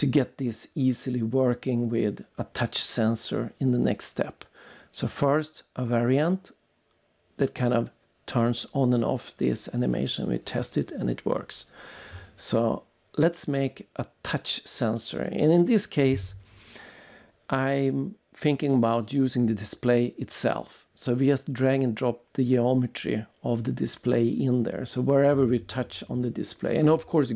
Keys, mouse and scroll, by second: 1.1 click, 3.6 click, 3.9 right click, 6.3 click, 6.9 click, 7.8 click, 8.0 double click, 15.3 click, 16.5 click, 19.2 click, 20.9 click, 22.8 click, 25.2 click, 27.0 click.